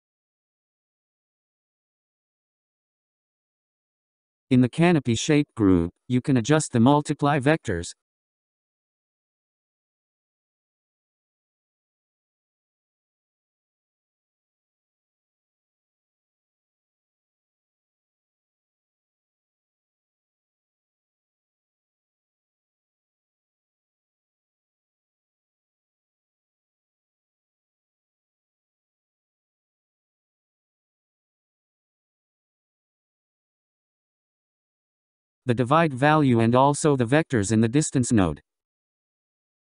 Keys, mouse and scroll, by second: 3.0-4.5 scroll down 12, 4.5-6.1 scroll up 8, 6.1-6.9 scroll up 3, 6.9-9.9 drag, 14.7-29.5 drag, 30.9-32.4 drag, 32.7-34.6 scroll down 10, 34.8-35.3 scroll down 2, 35.3-36.5 scroll up 10, 36.5-37.1 scroll up 2, 37.1-39.7 drag.